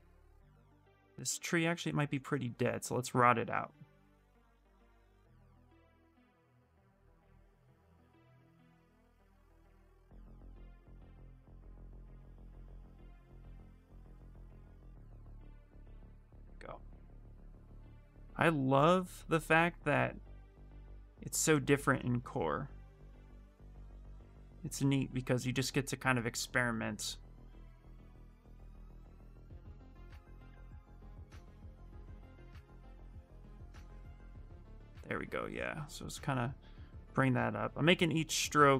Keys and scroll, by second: 12.5 w, 13.9 q.